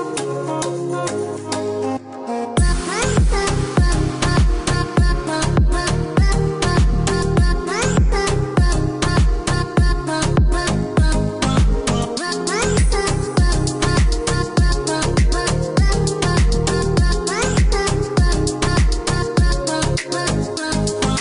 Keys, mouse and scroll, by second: 0.7 ctrl+click, 2.0 click, 4.5 click, 7.1 click, 7.9 click, 8.7 KP_0, 9.0 KP_Decimal, 9.2 KP_3, 10.3 KP_Enter, 10.9 Escape, 12.3 click, 13.2 space, 13.9 click, 16.9 KP_0, 17.1 KP_Decimal, 17.4 KP_0, 18.0 KP_Enter, 19.6 click.